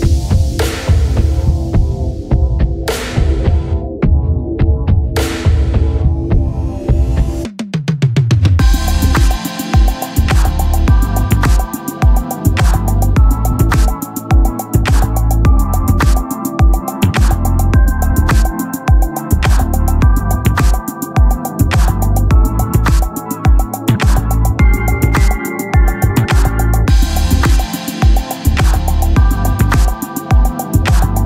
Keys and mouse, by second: 4.9 click, 8.6 click, 10.0 click, 13.0 click, 17.1 click, 20.2 click.